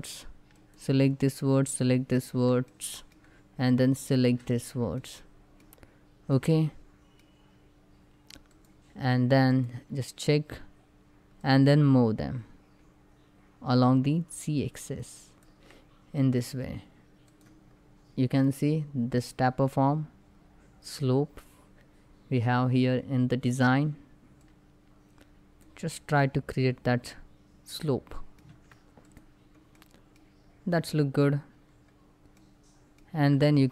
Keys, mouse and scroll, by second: 0.3 shift+click, 2.3 middle click, 3.4 shift+click, 4.3 scroll down 1, 4.7 middle click, 5.5 scroll down 1, 6.0-8.1 middle drag, 8.1 click, 9.2 click, 9.6 scroll up 1, 11.1-16.9 drag, 24.6 click, 25.5 scroll down 1, 25.9-28.1 middle drag, 28.1 Tab, 28.7 click, 29.4-31.2 middle drag, 31.2 scroll up 1, 32.0 middle click, 32.9 Tab, 33.1 scroll up 1.